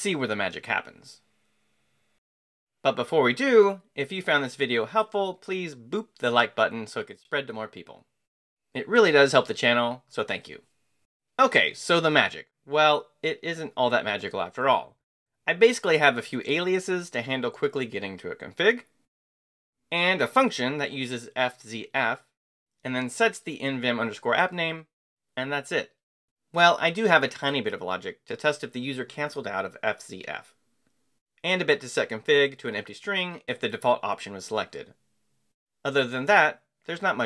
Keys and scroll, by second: 35.4 Return.